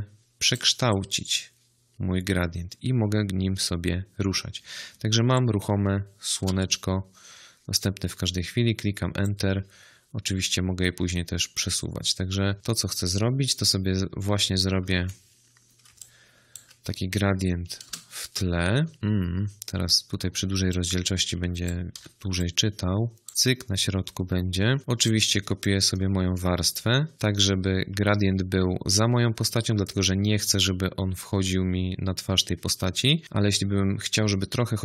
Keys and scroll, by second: 6.3 Return, 14.8 ctrl+t, 17.8 Return, 21.8 v.